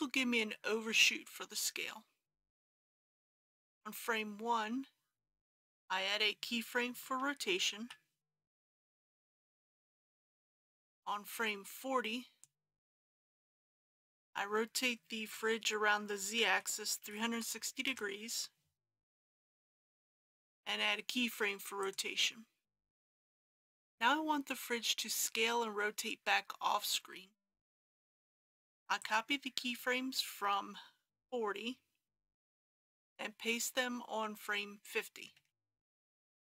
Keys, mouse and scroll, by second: 7.8 i, 9.6-12.9 drag, 15.2 r, 16.5 z, 17.1 KP_3, 17.2 KP_6, 18.7 KP_0, 19.9 i, 21.8-28.7 drag, 32.5 ctrl+c, 35.4 ctrl+v.